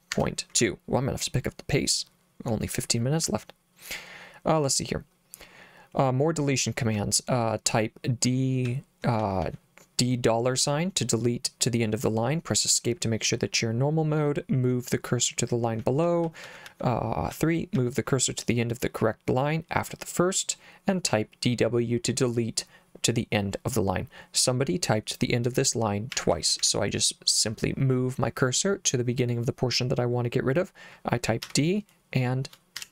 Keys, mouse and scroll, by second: 0.2 Escape, 0.6 j, 3.2 j, 6.9 k, 8.7 j, 9.2 j, 9.4 j, 15.8-18.1 typing, 21.1 k, 26.1 l, 26.3 l, 26.6 l, 31.5 d, 32.8 shift+4.